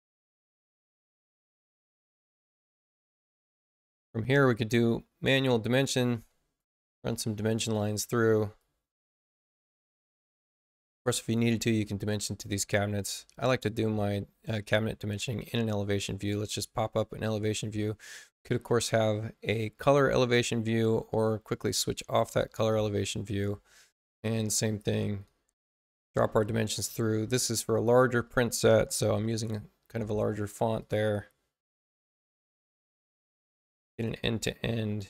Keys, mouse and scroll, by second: 6.1 click, 7.1 click, 8.5 click, 15.8 click, 21.0 click, 24.7-26.0 drag, 26.8 click, 27.5 click, 28.2 Return, 28.8-29.5 typing, 30.7 click, 32.0-33.4 drag, 33.9 click, 34.6-35.0 drag.